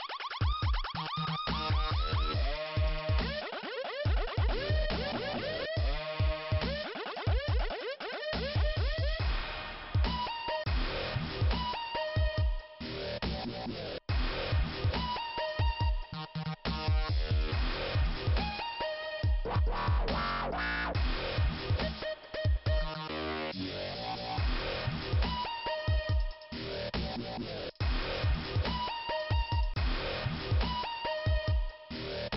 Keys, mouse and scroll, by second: 0.3 shift+Return, 0.5 middle click, 1.3 scroll up 2, 3.0 click, 3.1 click, 4.1 click, 4.2 click, 5.4 click, 6.8 click, 6.9 click, 8.1 click, 11.8 click, 11.9 click, 13.1 click, 14.7 middle click, 15.1-15.8 scroll down 1, 15.9 click, 18.4 shift+Return, 21.1 shift+Return, 21.2 shift+Return, 21.5 middle click, 22.2-23.1 scroll down 1, 27.1 shift+Return, 27.8 click, 29.2 click, 29.3 click, 29.8 click, 31.3-32.0 scroll up 1, 32.2 click.